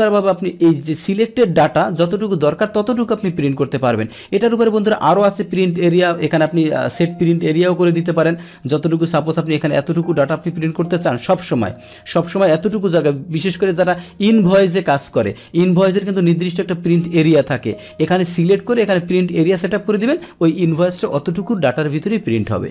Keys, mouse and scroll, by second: 5.0 click, 8.5 click, 9.5-13.1 drag, 16.2-17.9 drag, 20.7 click.